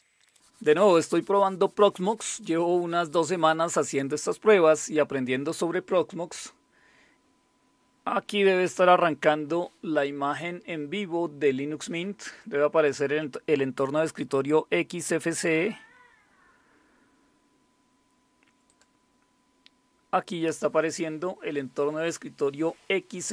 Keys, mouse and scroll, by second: 18.7 click.